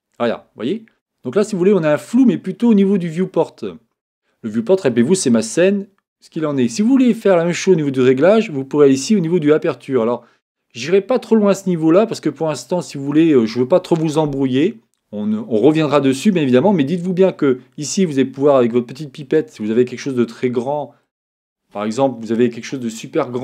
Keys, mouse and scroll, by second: 19.2-21.2 drag.